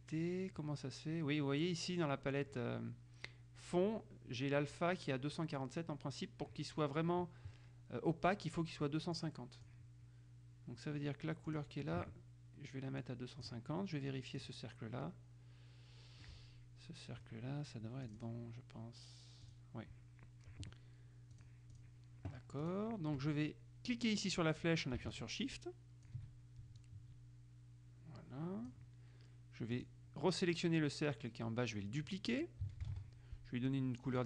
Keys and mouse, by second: 9.3-10.3 drag, 11.6 click, 13.2 click, 14.5 click, 18.2 click, 19.6 click, 21.6 click, 22.8 click, 25.3-26.8 shift+drag, 27.0-29.4 drag, 29.9 click, 33.0 ctrl+d.